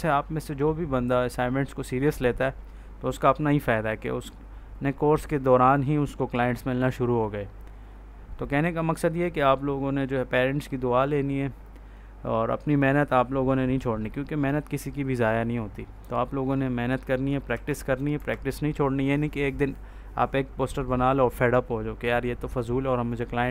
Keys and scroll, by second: 17.4 ctrl+s, 18.0 F4.